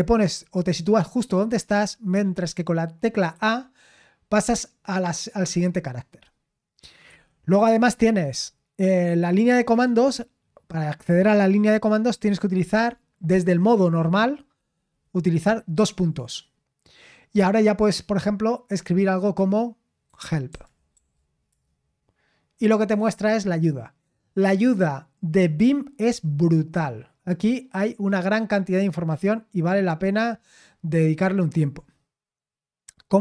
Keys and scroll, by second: 3.3 a, 7.1 Escape, 19.8-21.4 typing, 21.5 Return.